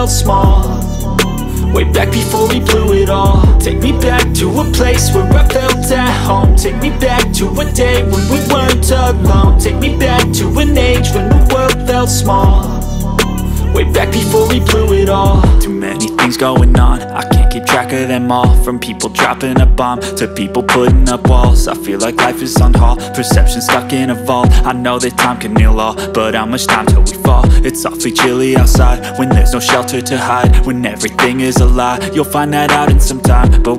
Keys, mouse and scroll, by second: 3.0-6.8 drag, 8.2 click, 11.5 ctrl+j, 15.8-19.3 drag, 22.5 click, 23.7 scroll up 1, 26.9 click, 27.6 right click, 32.2 click.